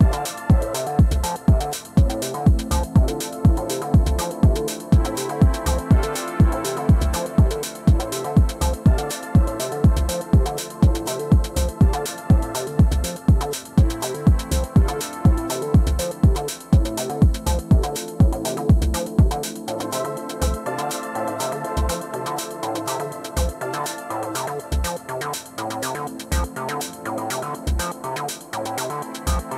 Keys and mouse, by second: 0.0 alt+middle click, 0.4-0.9 alt+drag, 1.4-1.7 alt+drag, 2.7 r, 2.9 click, 3.3 w, 3.5 click, 3.9 alt+middle click, 4.1 alt+click, 5.4 click, 6.1 ctrl+z, 6.3 r, 6.8-7.9 drag, 8.0 alt+click, 8.4 alt+click, 8.7 alt+middle drag, 8.8 alt+click, 9.3 alt+drag, 9.7 alt+click, 10.1 1, 10.5 alt+click, 11.5 ctrl+z, 12.1 alt+x, 12.6 alt+click, 13.6 ctrl+z, 15.0 alt+x, 16.0 1, 16.6 click, 17.2 alt+click, 17.8 r, 18.5 click, 19.1 click, 19.6 alt+click, 20.5 click, 21.4 alt+click, 22.8 click, 23.5 alt+click, 24.2-27.3 drag, 27.4 alt+click, 28.0 alt+click, 28.6 click, 29.3 alt+click.